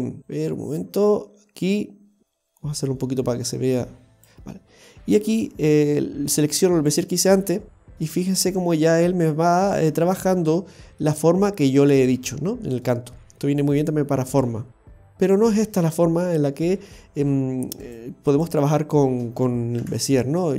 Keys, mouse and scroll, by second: 0.2 click, 5.2 click, 7.6-7.9 scroll down 4, 7.9 middle click, 10.1-10.5 scroll down 2, 10.3 middle click, 12.5-13.2 scroll down 2, 12.8 middle click, 16.3-17.8 scroll up 4, 17.8 right click, 18.3 right click, 19.8 Delete.